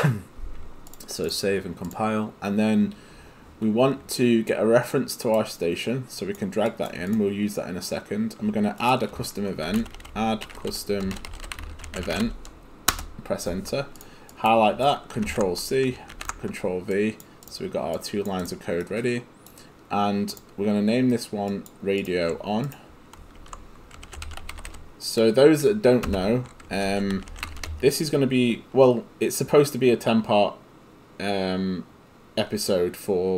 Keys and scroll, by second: 9.8-12.7 typing, 12.9 Return, 15.3 ctrl+c, 16.2 ctrl+v, 23.4 ctrl+a, 23.8-28.1 typing.